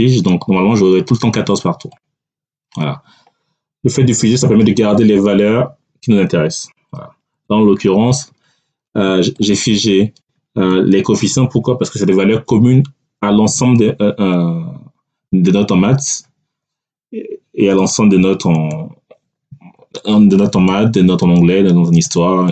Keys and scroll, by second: 7.2 Delete.